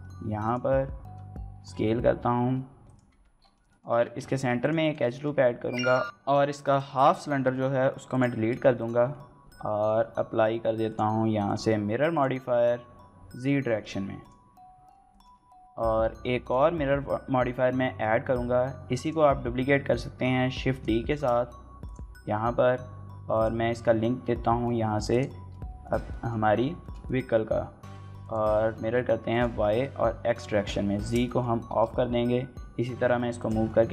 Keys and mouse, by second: 0.2 click, 0.8 Tab, 1.4 s, 2.7 click, 2.9 Tab, 3.5 shift+middle click, 3.7 Tab, 4.1 ctrl+r, 4.6 right click, 4.9 shift+middle click, 5.2 3, 5.8 alt+click, 6.4 shift+middle click, 6.7 middle click, 7.3 shift+click, 9.2 Tab, 9.2 x, 9.6 click, 10.7 drag, 11.4-12.0 drag, 12.9 click, 14.0 click, 14.9 shift+middle click, 16.2 click, 18.8-20.1 drag, 20.5 click, 20.9 shift+d, 21.6 click, 25.6 shift+middle drag, 25.9 middle drag, 26.6 shift+middle click, 26.9 middle click, 28.0 click, 29.1 click, 30.0 drag, 30.8 shift+middle drag, 31.0 middle drag, 31.6 x, 33.2 click, 33.6 shift+middle click, 33.8-33.9 middle drag.